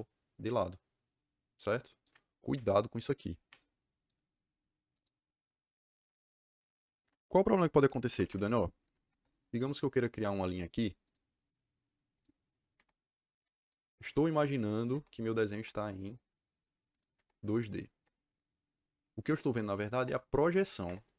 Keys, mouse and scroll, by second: 4.9 click, 8.0 Escape, 8.3 Escape, 8.7 ', 9.0 Return, 10.9 click, 12.1 click, 12.7 Return, 13.3 Return, 13.5 click, 14.6 click, 14.8 Return, 15.5 Return, 15.9 click, 16.8 click, 17.0 Return, 17.9 Return, 18.2 click, 19.7 click, 19.9 Return, 20.8 Return, 20.9 click.